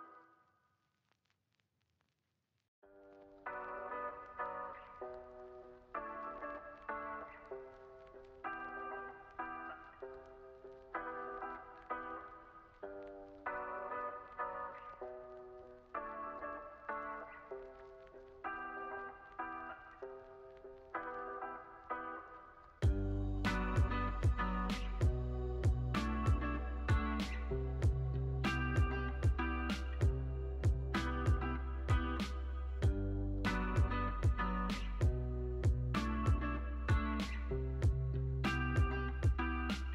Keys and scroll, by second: 0.6 x, 4.9 x, 6.4 x, 8.7 x, 11.4 x, 13.9 x, 14.5 z, 15.1 x, 16.3 z, 18.5 space, 19.9 super+=, 23.3 Tab, 24.6 space, 25.9 super+=.